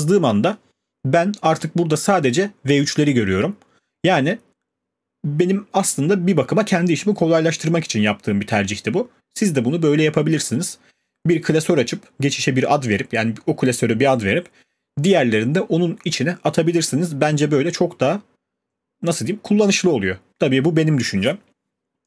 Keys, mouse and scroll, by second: 0.0-0.3 typing, 3.6 click, 6.7-11.8 drag.